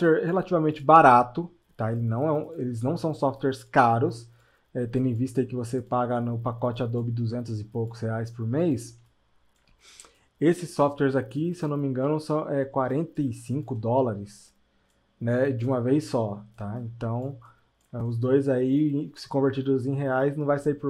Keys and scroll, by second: 16.6 space, 20.4 space.